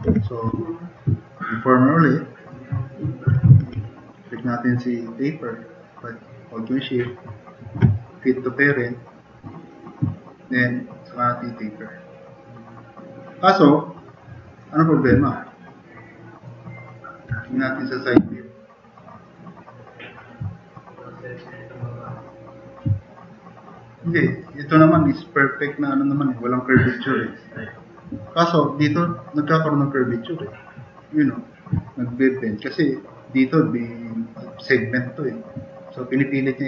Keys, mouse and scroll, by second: 0.1 4, 15.5-16.0 drag, 16.1 drag, 16.1 right drag, 16.7 click, 16.7-17.1 middle drag, 18.1 s.